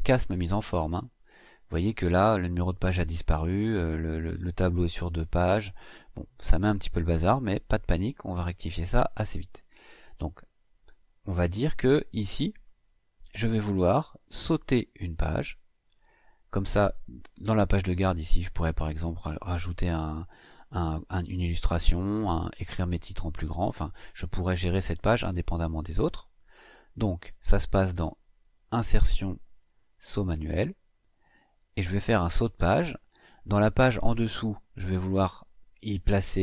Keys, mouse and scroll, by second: 0.0-1.2 scroll down 6, 1.8 scroll down 2, 2.8-3.1 scroll down 2, 3.3 scroll up 2, 4.7-5.0 scroll up 2, 5.3-5.6 scroll up 2, 7.5-7.9 scroll up 2, 12.2 click, 28.5 click, 29.7 click, 32.8 click.